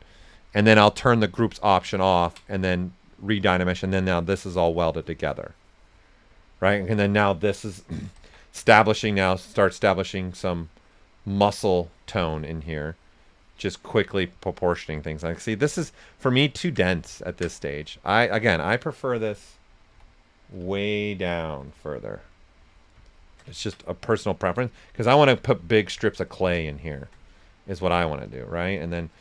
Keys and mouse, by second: 1.9 ctrl+click, 3.7-6.7 shift+drag, 6.7 right click, 7.7-8.7 typing, 9.0 click, 12.3-14.0 shift+drag, 14.0 right click, 15.2 shift+f, 15.8 ctrl+right click, 18.4 click, 19.9-20.5 typing, 21.5 Return, 23.0 shift+click, 24.1 right click, 24.7 click, 26.7 shift+click, 27.2 right click, 28.1 s, 28.2 click, 28.7 shift+right click.